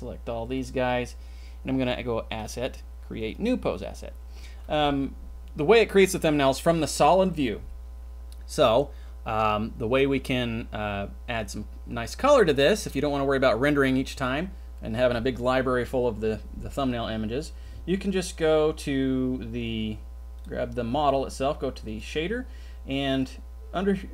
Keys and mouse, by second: 2.4-3.5 drag, 21.8 click.